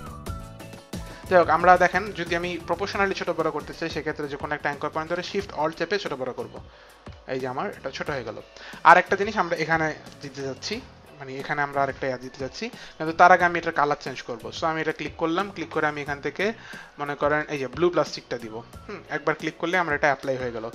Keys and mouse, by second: 5.5 alt+shift+click, 14.2 click, 17.3 click.